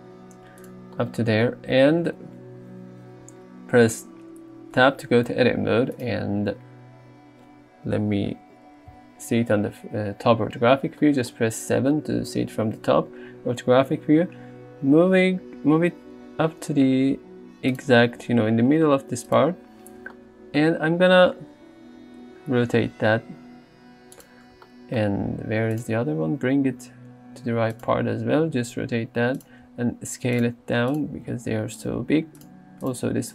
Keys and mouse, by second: 4.9 Tab, 6.0 click, 7.1 a, 9.0 KP_7, 11.2 shift+middle click, 14.1 g, 17.8 click, 22.2 r, 25.8 click, 26.8 g, 27.8 click, 28.8-32.0 typing, 30.4 click, 31.0 click.